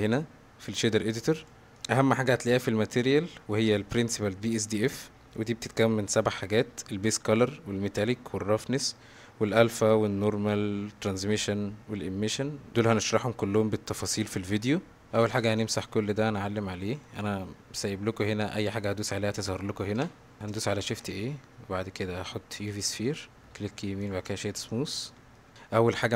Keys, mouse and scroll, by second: 0.1-1.5 drag, 4.0-4.9 drag, 5.3 click, 16.7-17.0 middle drag, 19.8 scroll up 1, 20.8 shift+a, 25.1-25.5 middle drag, 25.5 s.